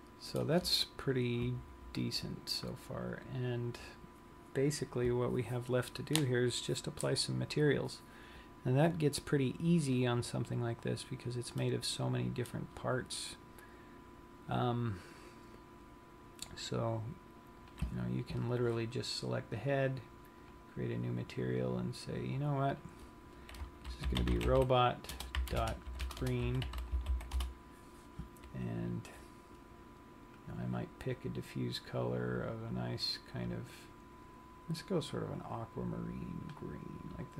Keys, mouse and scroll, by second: 3.1-6.5 scroll up 4, 10.6-11.8 scroll down 1, 11.8 middle click, 13.7-14.1 scroll up 4, 14.7 scroll down 1, 17.9 click, 19.7 click, 20.6 click, 22.9 click, 26.4 shift+BackSpace, 27.0 e, 30.4 click.